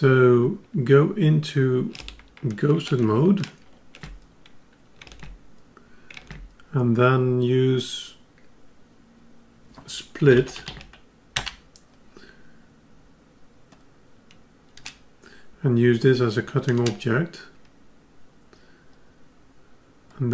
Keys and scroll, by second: 3.4 ctrl+alt+g.